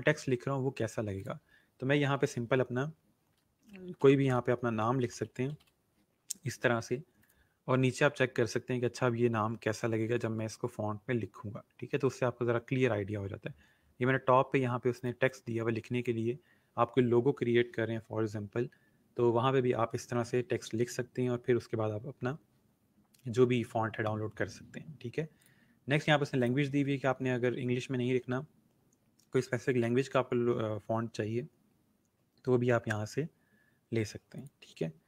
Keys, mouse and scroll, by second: 1.1 click, 3.3-6.1 typing, 7.2 click, 7.6 scroll down 1, 13.1 scroll up 1, 14.9 click, 25.4 click, 28.2-30.1 scroll down 1, 31.1-32.5 scroll up 1, 34.3 click.